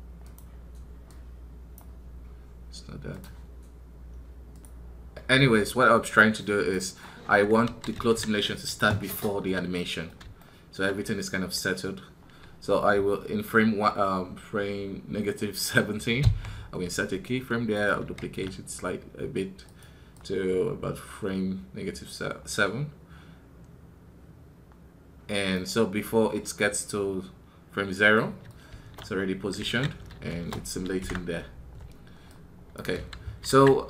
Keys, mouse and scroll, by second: 17.5 right click, 28.2-29.2 middle drag, 29.2 scroll down 1.